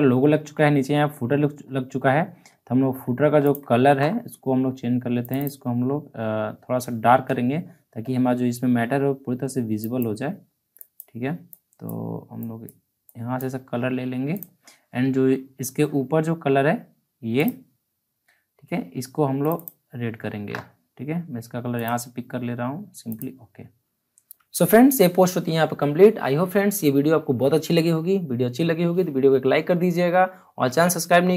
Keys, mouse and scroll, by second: 0.8 alt+scroll up 1, 1.1-1.4 alt+scroll down 1, 1.4 alt+scroll up 1, 1.9-2.4 scroll down 1, 2.7 alt+scroll up 1, 3.4 click, 9.7-14.3 drag, 17.3 click, 24.0-24.9 alt+scroll down 3.